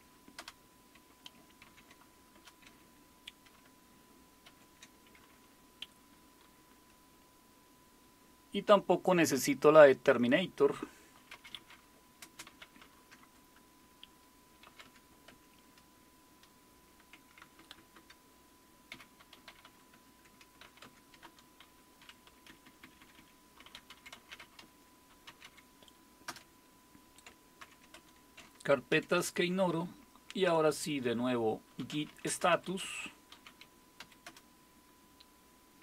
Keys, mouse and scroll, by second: 0.1-0.9 typing, 1.6 ctrl+o, 2.4 Return, 4.5 ctrl+x, 11.1-13.3 typing, 14.4-15.1 typing, 15.3 Tab, 17.4-29.4 typing, 23.1 Down, 27.6 ctrl+o, 31.6-34.0 typing, 34.2 Return.